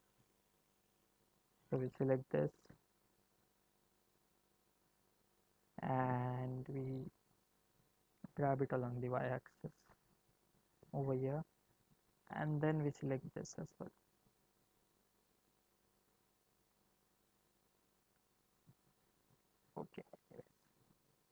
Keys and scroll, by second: 8.1 g, 19.6 ctrl+z.